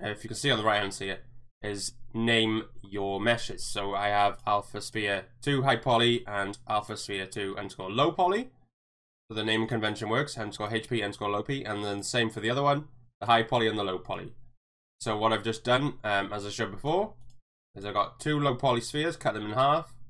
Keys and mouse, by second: 4.3 click, 6.8 click, 9.7 click, 9.9 click, 10.6 click, 15.7 click, 16.8 click, 17.7 click, 18.5 Tab, 18.8 a.